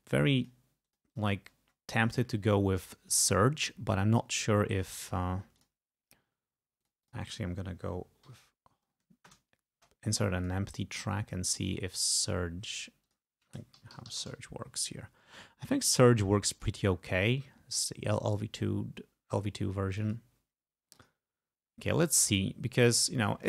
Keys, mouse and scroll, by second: 0.9 click, 1.5-2.4 scroll down 2, 5.6 click, 6.9 click, 8.3 Home, 9.3 Return, 10.5 click, 12.1 right click, 13.1 click, 13.6-14.9 typing, 16.6 click, 20.0 click, 21.1 click.